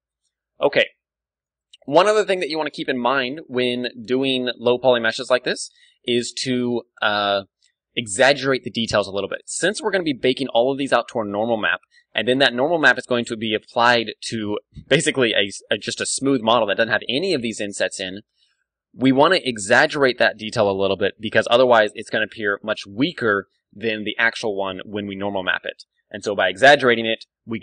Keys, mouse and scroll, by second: 0.2 KP_1, 1.0 Tab, 1.7 ctrl+w, 2.3-4.4 middle drag, 2.6 Tab, 26.8 Tab, 27.3-27.6 middle drag.